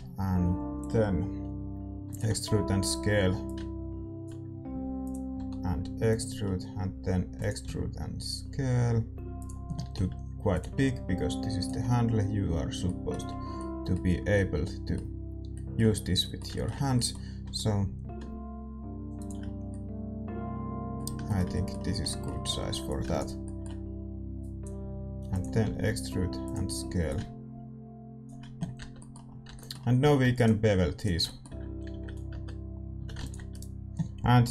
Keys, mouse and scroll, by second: 2.0 e, 2.3 s, 3.4-5.3 drag, 4.6 s, 5.3 e, 6.4-9.3 middle drag, 7.3 e, 7.6 s, 9.9 s, 10.6 g, 11.8-19.1 middle drag, 17.4 e, 19.5-25.2 middle drag, 22.8-26.4 drag, 25.2 e, 25.6 s, 27.0-28.9 drag, 28.6-32.1 middle drag, 28.7 Tab, 29.4 Tab, 30.0 a, 30.3-32.1 right drag, 31.8 ctrl+b, 32.3 Tab, 32.3 middle click, 32.9 a, 33.5 ctrl+s, 33.5-34.5 right drag.